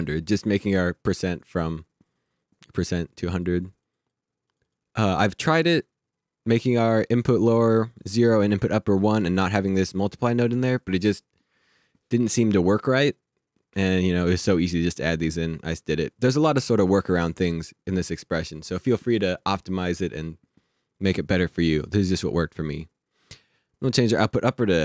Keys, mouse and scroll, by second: 3.2 click, 23.8 click.